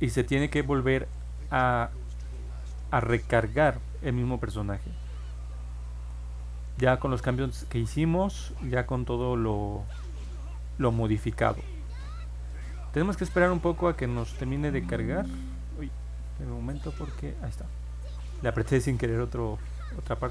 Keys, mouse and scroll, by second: 14.5 click, 15.9 click, 16.9-18.2 drag.